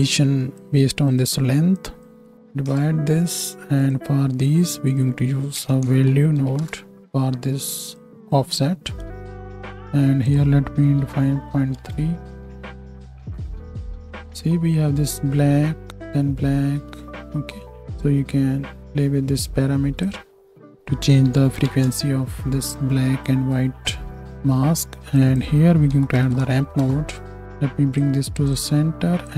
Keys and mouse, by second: 1.2 click, 3.9 click, 9.2-10.2 ctrl+shift+drag.